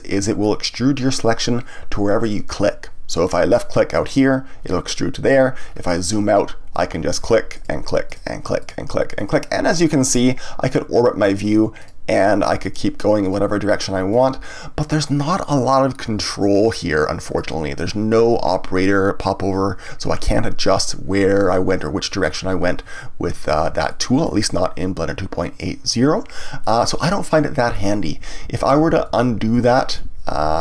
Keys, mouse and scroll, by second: 0.1-3.1 middle drag, 4.1 click, 5.6-6.7 scroll down 1, 6.7 click, 7.5 click, 8.0 click, 8.6 click, 9.1 click, 10.1-11.8 middle drag, 11.8 click, 12.6 click, 13.2 click, 14.1-17.3 middle drag, 23.9-28.4 shift+middle drag, 28.4 ctrl+z.